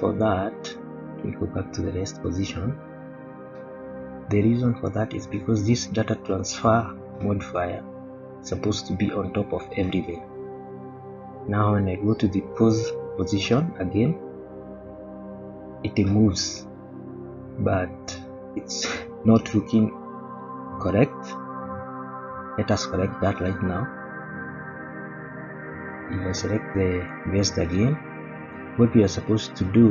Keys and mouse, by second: 0.7 click, 3.2 click, 4.7 click, 7.7-9.3 drag, 11.7 click, 12.8 click, 14.5 click, 16.0-20.7 middle drag, 21.3-21.6 middle drag, 23.4 click, 24.4 middle click, 27.6 click.